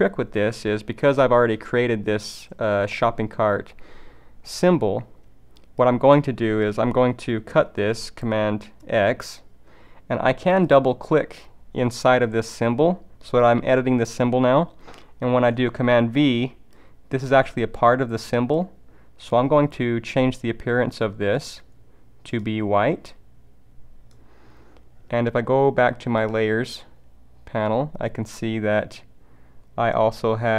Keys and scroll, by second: 8.8 super+x, 15.3 super+v.